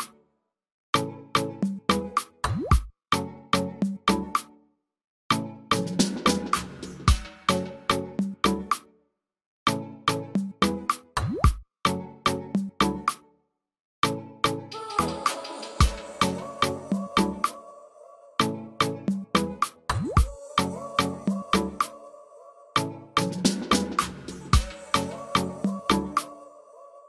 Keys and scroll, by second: 0.4 ctrl+g, 7.1 ctrl+g, 8.6 ctrl+g, 8.7-9.3 typing, 26.7 ctrl+alt+space.